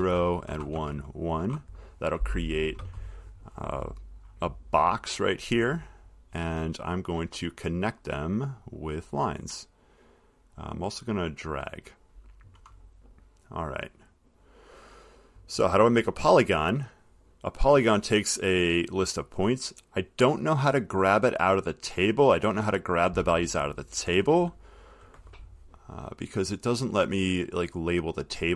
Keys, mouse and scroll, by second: 0.2 Tab, 1.6 1, 4.0 middle click, 4.0 middle click, 8.0 click, 9.7 click, 11.6 click, 14.3 click, 15.4 click, 26.7 click, 27.4 click.